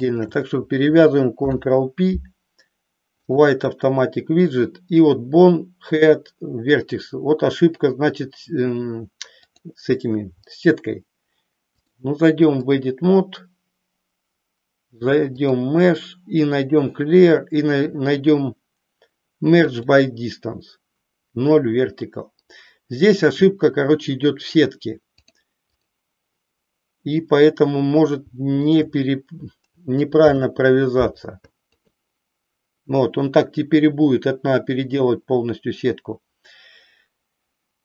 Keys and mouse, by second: 0.0 shift+click, 1.3 ctrl+p, 9.5 click, 11.7-12.9 drag, 15.5-19.9 drag, 25.2 click, 28.6 shift+click, 30.1 ctrl+p.